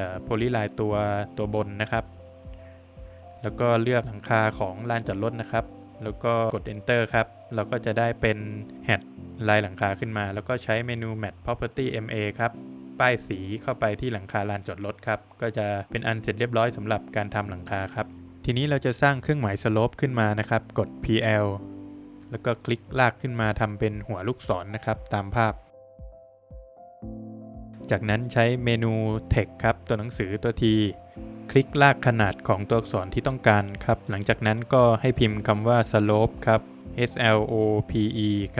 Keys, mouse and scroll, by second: 2.3 click, 4.2 click, 5.6 space, 6.4 Return, 6.9 Escape, 8.7 space, 9.6 click, 12.2 space, 12.9 Escape, 14.2 scroll down 1, 14.6 middle click, 15.0 Escape, 15.2 scroll down 1, 15.5 middle click, 16.8 middle click, 16.9 click, 18.1 Escape, 18.1 middle click, 20.3 space, 20.8-21.1 scroll up 2, 22.0 click, 23.5 scroll up 2, 24.6 click, 26.4 <, 26.6 space, 26.8 Escape, 27.1 scroll down 2, 27.4 middle click, 29.1 space, 30.1 click, 32.0 click, 33.6 click, 35.2-38.4 typing.